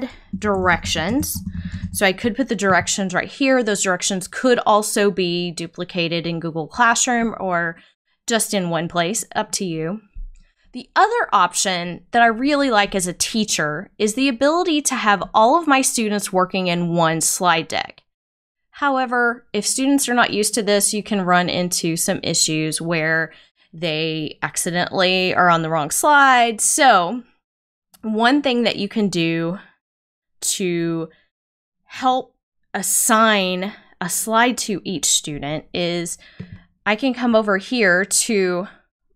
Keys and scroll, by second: 0.1-1.8 typing.